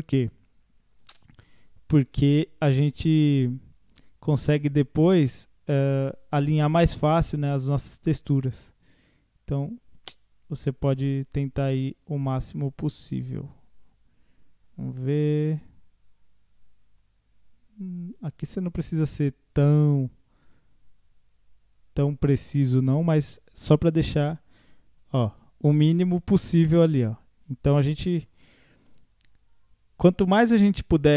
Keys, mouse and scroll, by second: 2.1 r, 6.9 g, 24.0 Tab, 24.3 scroll down 1, 24.6-27.6 middle drag, 30.9-31.1 scroll down 11.